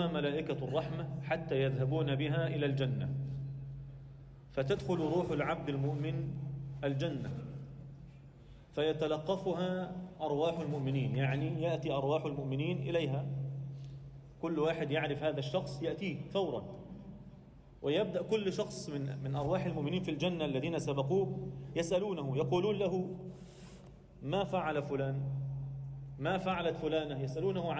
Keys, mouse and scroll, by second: 4.9-5.5 scroll down 1, 5.5 Tab, 6.2 alt+shift+middle drag, 7.0 KP_1, 7.6-8.1 scroll up 2, 8.1 alt+a, 8.4 alt+shift+middle drag, 8.7-9.3 scroll up 2, 9.3 alt+shift+middle click, 13.6 shift+middle drag, 14.0-14.6 scroll up 2, 14.6 click, 14.8-15.6 scroll down 1, 15.6 alt+shift+Tab, 15.6-16.8 scroll down 2, 15.7 alt+shift+middle click, 16.8 middle click, 18.1 click, 18.5 scroll down 1, 18.8 2, 19.1 click, 20.9 Tab, 22.5 F2, 24.5 a, 25.2 m, 26.9 click, 27.4 click.